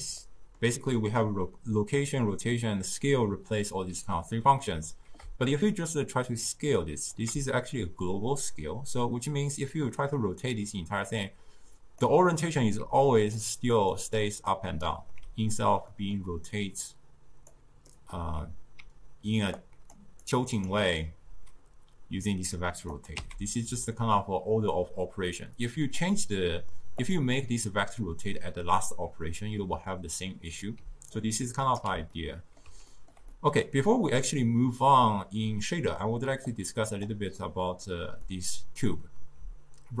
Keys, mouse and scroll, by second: 0.3-3.3 middle drag, 4.7 middle click, 5.5-8.6 shift+drag, 9.8-12.9 drag, 12.9-15.3 typing, 13.1 drag, 13.6 click, 14.0 click, 14.6 click, 16.0-16.9 middle drag, 16.9 drag, 17.9 middle click, 18.9-21.1 typing, 19.6 click, 20.3 click, 23.0 click, 23.2 x, 24.3 click, 25.7-26.6 drag, 26.6-27.1 middle drag, 27.1 click, 30.9 d, 31.2 right click, 31.9 d, 32.2-36.5 middle drag, 36.5 click, 37.4-40.0 middle drag.